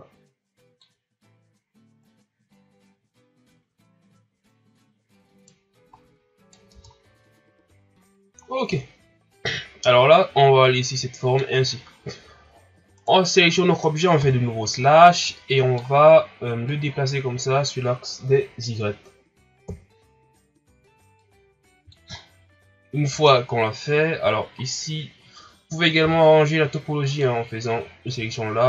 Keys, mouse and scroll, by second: 2.0 right click, 5.9 right click, 6.7 Tab, 6.9 scroll down 3, 7.4 scroll up 2, 8.4 scroll down 1, 8.7-11.7 middle drag, 13.0 right click, 14.2 KP_Divide, 15.2-16.6 middle drag, 16.6-19.6 drag, 19.6 KP_1, 20.3-21.2 scroll up 3, 21.2 click, 22.1 scroll down 5, 22.4-23.1 scroll up 3, 23.1 Tab, 24.6-25.0 scroll up 3, 26.0 k.